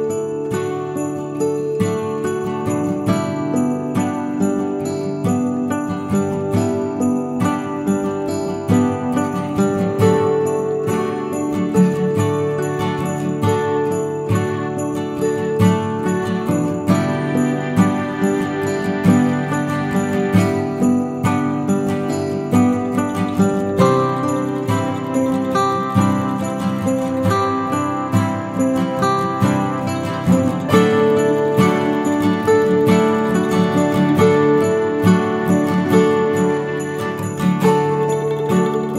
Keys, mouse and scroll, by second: 0.0 middle click, 2.0 scroll down 3, 2.2 middle click, 2.8-3.2 scroll up 1, 3.2 scroll down 1, 4.0 middle click, 4.5-5.6 scroll up 4, 5.8 middle click, 5.8-6.3 scroll down 2, 6.3 scroll down 1, 8.8 shift+h, 9.3 shift+h, 10.6 click, 11.2 click, 12.0-12.6 scroll down 4, 12.2 middle click, 12.7-13.7 scroll up 2, 13.7 scroll up 2, 14.7 middle click, 14.7-15.0 scroll down 1, 15.0 click, 15.6 click, 16.3 shift+middle click, 16.6-17.3 scroll up 3, 17.1 Tab, 17.8 alt+click, 18.4 ctrl+b, 20.8 click, 21.3 alt+click, 22.3 ctrl+b, 23.3 Tab, 23.7 Delete, 24.3 click, 24.6 click, 25.2 click, 26.4 click, 27.0 Tab, 27.6 alt+click, 27.7 alt+click, 27.8 middle click, 28.3 ctrl+b, 30.6 click, 31.4 Tab, 31.8 ctrl+z, 32.0 ctrl+z, 32.2 ctrl+z, 32.4 ctrl+z, 32.8 ctrl+z, 33.1 ctrl+z, 33.6 ctrl+z, 34.2-34.8 scroll down 2, 35.0 ctrl+a, 37.0 click, 37.8 click, 38.6 click.